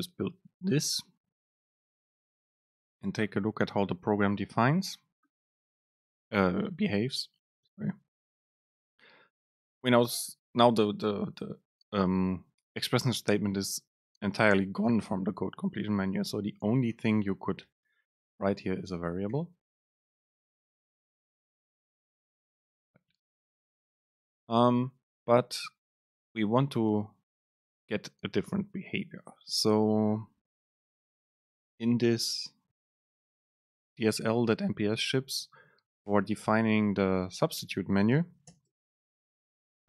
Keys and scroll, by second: 8.8 super+space, 20.1 BackSpace, 38.7 super+space.